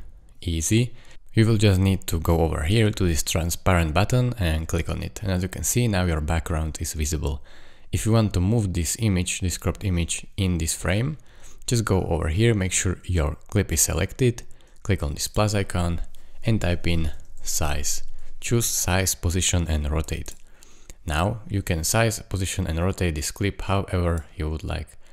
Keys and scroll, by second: 16.7-17.8 typing.